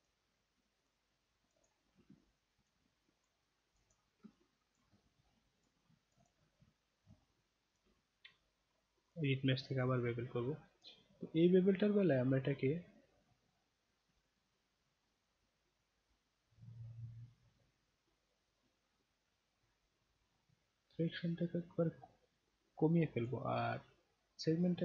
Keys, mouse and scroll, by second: 0.0 shift+click, 0.8 shift+click, 1.4 shift+click, 2.2-2.7 alt+drag, 3.2 shift+click, 3.7 shift+click, 3.8 shift+click, 4.3-4.8 alt+drag, 5.6 shift+click, 6.1 shift+click, 6.2 shift+click, 7.1-7.8 alt+drag, 9.1 click, 9.7 click, 11.6 middle click, 12.6 middle click, 15.3-23.2 drag, 23.9 click.